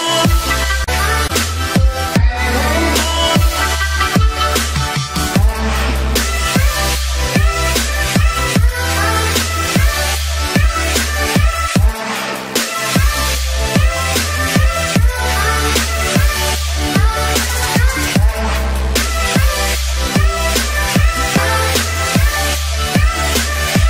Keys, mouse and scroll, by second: 14.7-23.8 drag.